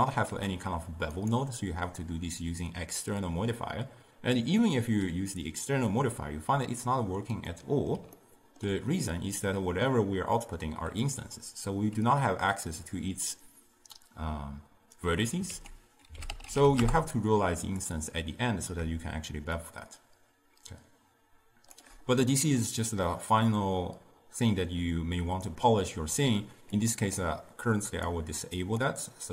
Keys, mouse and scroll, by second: 0.4 ctrl+a, 7.6-11.3 middle drag, 15.6 ctrl+a, 19.7-22.7 shift+drag, 22.9-26.0 middle drag, 26.8 click, 28.0 click, 28.7-29.3 drag.